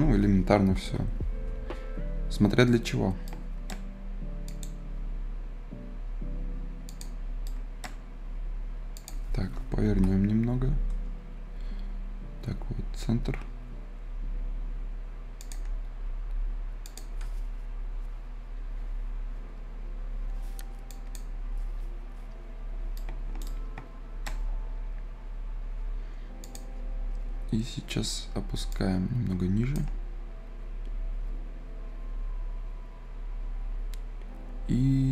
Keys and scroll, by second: 0.6 Return, 0.8 Return, 9.7 Return, 10.0 Return.